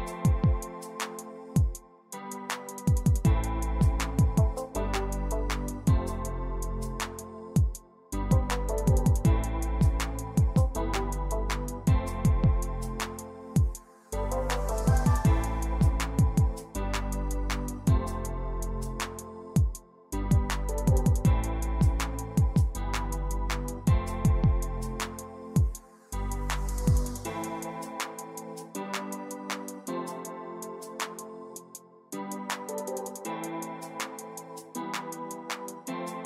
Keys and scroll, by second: 9.4-12.0 typing, 12.0 Tab, 16.2 f, 19.2-20.1 typing, 20.1 shift+Left, 20.3 shift+Left, 20.7 ctrl+c, 22.4 Return, 25.0 h, 29.6-30.5 typing.